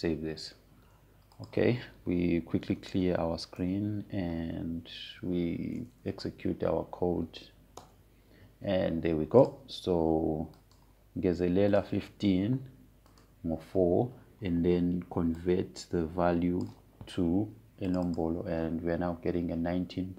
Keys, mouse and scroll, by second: 1.6 click, 4.1-5.1 typing, 5.3 Return, 6.6 Up, 9.5 Return, 11.1 click, 17.1-19.6 drag.